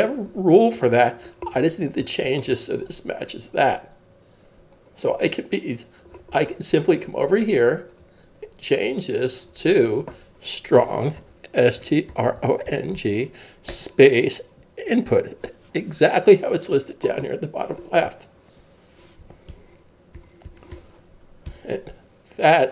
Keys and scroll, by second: 11.2-14.1 typing, 19.2-20.9 typing, 21.5 Return.